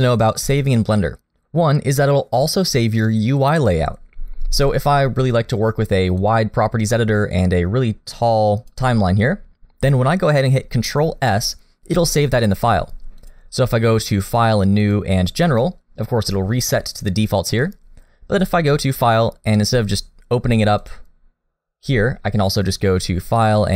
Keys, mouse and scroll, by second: 6.2 click, 8.1 click, 18.4 click, 23.4 click.